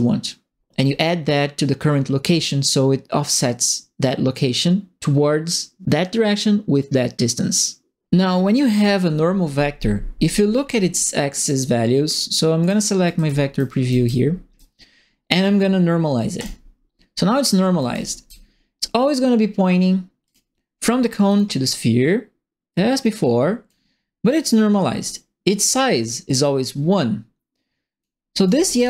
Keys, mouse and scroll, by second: 11.3 click, 12.6 click, 12.9-13.8 typing, 13.0-14.5 right drag, 16.3 click, 17.6-18.4 typing, 17.7 right click, 20.2 click, 21.2 click, 22.7 click, 24.3-28.0 drag, 28.2-28.8 typing, 28.4 right click.